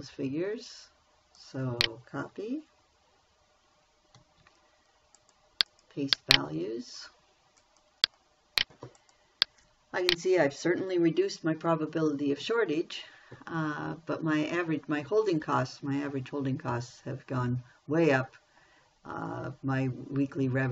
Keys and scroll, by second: 4.6 ctrl+c.